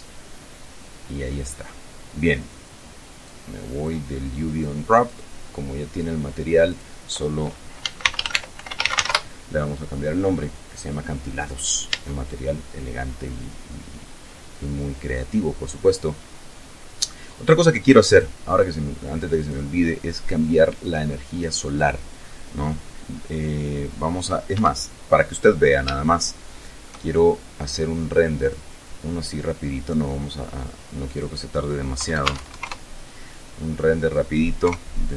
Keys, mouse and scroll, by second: 0.3-1.1 scroll down 1, 1.3 scroll up 1, 2.0 scroll down 1, 3.3 click, 5.1 click, 6.7 click, 7.6-9.6 typing, 11.1-11.5 scroll up 2, 11.9 Tab, 13.0-13.3 scroll down 2, 15.9 click, 18.1 right click, 19.4 click, 21.8 click, 24.5 Escape, 25.6 scroll down 2, 26.0 shift+middle click, 28.4 click, 29.5-31.0 scroll down 6, 31.0 click, 32.0 KP_1, 32.2 KP_0, 32.3 Tab, 32.4 KP_1, 32.5 KP_0, 32.7 KP_Enter, 33.7-34.1 scroll up 2, 34.6 KP_0.